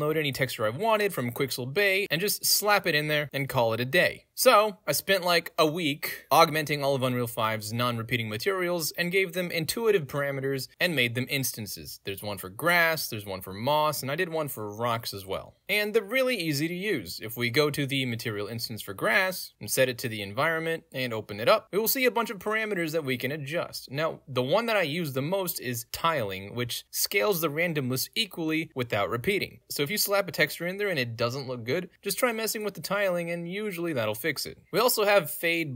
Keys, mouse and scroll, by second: 0.6 click, 1.5 click, 2.5 middle click, 2.5-5.4 scroll down 3, 2.7-5.4 middle drag, 6.1 click, 6.7 click, 7.1 click, 7.4 click, 8.3 click, 8.7 middle click, 8.7-9.0 scroll down 4, 8.8 right click, 9.0 middle click, 9.2 right click, 9.4 ctrl+space, 9.8 click, 10.3 click, 10.4 click, 11.2 click, 12.7 click, 15.3 click, 16.0 click, 16.1 click, 16.9 click, 17.0 click, 19.9-20.4 drag, 20.8 F11, 21.2 right click, 21.4 click, 21.7 click, 21.9 click, 22.2 drag, 22.5 click, 22.7 drag, 22.9 click, 23.1 drag, 23.3 click, 25.8-34.5 drag, 35.2-35.7 drag.